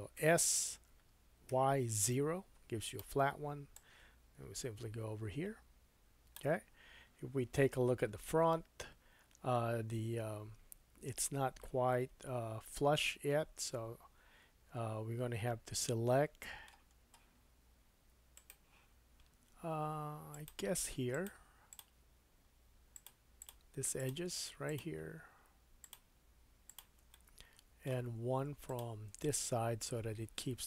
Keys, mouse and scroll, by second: 2.1 s, 3.0 middle click, 3.7-5.1 drag, 8.1 KP_1, 12.1-12.8 scroll up 2, 12.8-14.6 scroll up 1, 15.8 middle click, 17.0-20.5 drag, 17.0-18.3 scroll down 2, 20.5 middle click, 21.1 shift+click, 21.2 shift+middle click, 21.7 shift+click, 21.8-22.9 shift+middle drag, 22.9 shift+click, 23.1 shift+middle click, 23.4 shift+click, 23.5 shift+middle click, 24.0 shift+click, 24.1 shift+middle click, 24.7 shift+click, 24.8-25.8 shift+middle drag, 25.8 shift+click, 25.9 shift+middle click, 26.7 shift+click, 26.8-28.6 shift+middle drag, 28.6 shift+click, 28.8-30.6 shift+middle drag.